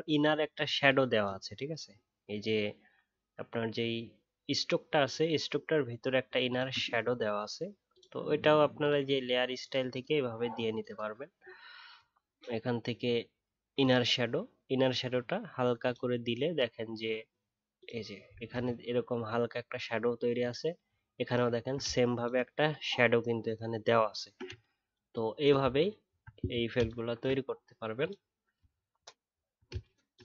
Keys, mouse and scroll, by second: 6.4 ctrl+click, 18.6 alt+scroll up 1, 21.0 alt+scroll up 1, 21.5 alt+scroll down 3, 26.2-28.1 alt+scroll down 8, 28.7-29.9 alt+scroll down 1.